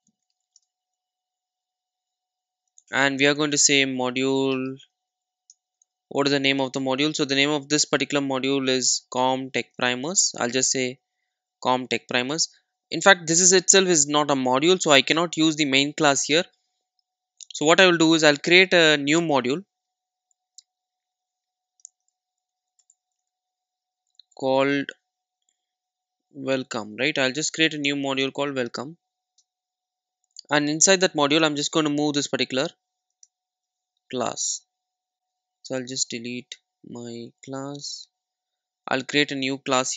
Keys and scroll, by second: 18.1 Delete, 21.7 Delete, 35.7 Delete, 39.7 Delete.